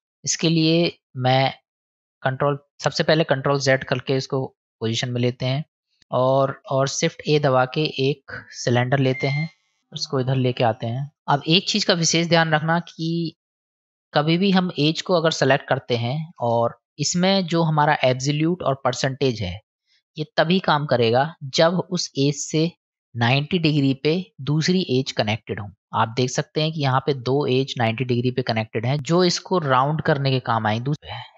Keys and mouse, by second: 1.9 middle click, 3.0 click, 7.2 shift+a, 9.8 click, 12.3 middle click, 13.3 middle click, 16.2 ctrl+b, 17.5-19.2 drag, 20.7-21.9 middle drag, 24.6 middle click, 28.0 middle click.